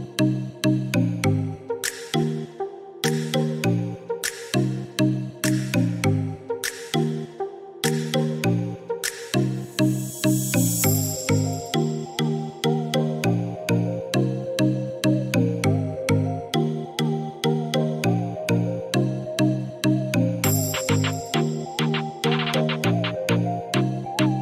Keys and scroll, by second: 4.2 1, 4.2 5, 4.5 Return.